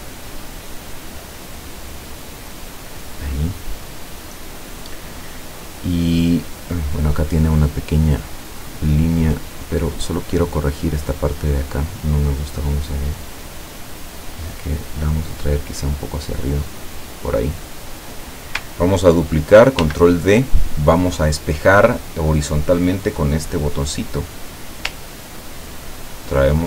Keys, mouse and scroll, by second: 0.7 click, 2.8 click, 10.4 click, 11.8 click, 12.7-13.9 drag, 14.2-17.2 drag, 17.9 click, 19.8 ctrl+d, 23.9 click, 25.5-26.6 ctrl+drag.